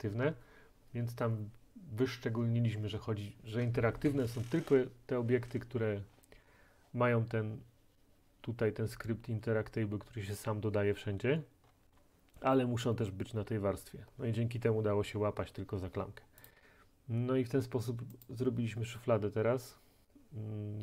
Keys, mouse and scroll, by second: 6.1 middle click, 6.1 middle click, 6.2 middle click, 6.5 middle click, 8.7 middle click, 11.2 middle click, 11.2 middle click, 11.4 middle click, 11.5-14.1 scroll, 16.5 click, 18.3 click.